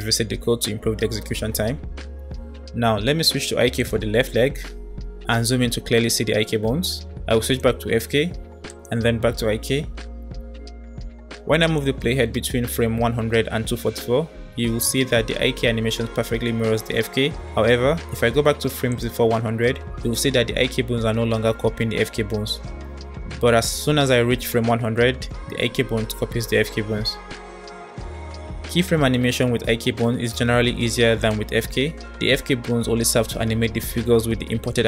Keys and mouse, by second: 3.8 click, 7.5 click, 8.7 click, 11.5-17.7 drag, 18.9 click, 19.5-27.2 middle drag, 29.8 middle click.